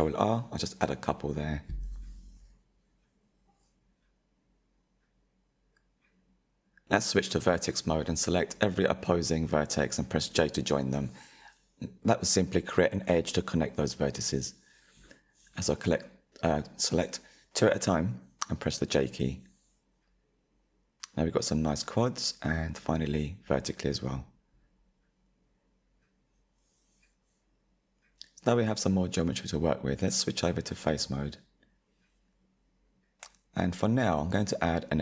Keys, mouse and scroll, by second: 0.8-2.2 middle drag, 2.2 click, 2.7-3.2 scroll up 2, 3.2-4.6 shift+middle drag, 4.6 1, 5.2-6.4 middle drag, 6.4 click, 7.1 shift+click, 9.0 j, 9.9 click, 10.6 shift+click, 11.7 j, 12.8 click, 14.3 shift+click, 15.3 j, 15.7 middle click, 16.3-16.9 scroll up 1, 16.9 click, 17.6 shift+click, 18.8 j, 19.5 click, 20.2 shift+click, 21.1 j, 22.3 click, 23.4 shift+click, 24.9 j, 25.4 click, 26.0-27.0 middle drag, 27.0-27.5 scroll down 2, 27.5-30.6 shift+middle drag, 30.6-32.6 drag, 32.7-34.1 middle drag, 34.1 ctrl+r.